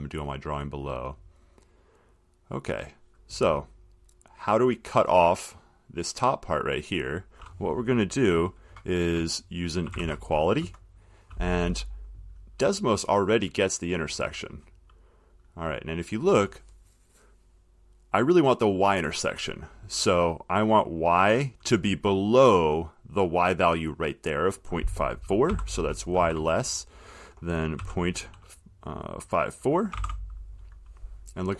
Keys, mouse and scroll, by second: 0.7 click, 7.3 click, 10.0-10.8 typing, 25.7 y, 26.3 shift+,, 28.0 ., 29.9-30.6 typing.